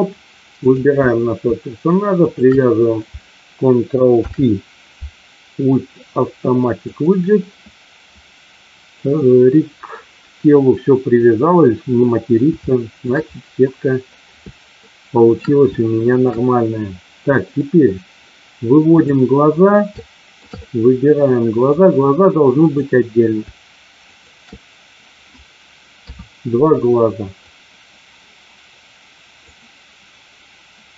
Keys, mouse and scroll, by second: 0.7 click, 4.2 ctrl+p, 8.9-9.9 middle drag, 11.9 middle click, 12.7 shift+middle click, 14.7 shift+middle click, 15.7 shift+middle click, 17.5 middle click, 18.9 click, 19.9-20.3 shift+middle drag, 20.5-21.7 middle drag, 22.5 click, 23.9 shift+click, 25.9 KP_3, 27.4-29.4 drag.